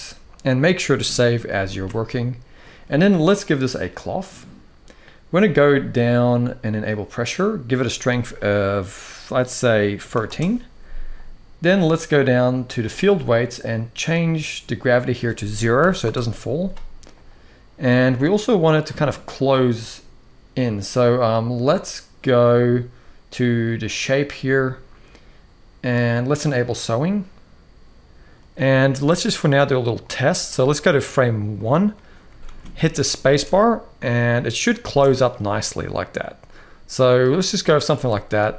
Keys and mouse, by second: 1.2 ctrl+s, 1.5 ctrl+s, 1.8-2.3 middle drag, 3.5 click, 6.7 click, 7.5-10.1 drag, 12.6 click, 14.7-15.8 drag, 23.6 click, 26.4 click, 29.8 click, 31.4 click, 32.2 ctrl+s, 33.0 space, 34.7 space, 35.1-36.9 middle drag, 37.6 space, 38.2 space.